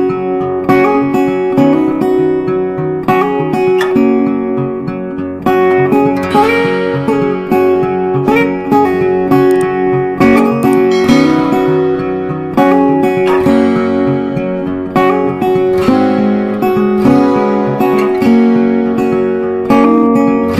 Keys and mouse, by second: 1.8 click, 7.3 click, 18.0 click, 18.1-20.5 drag.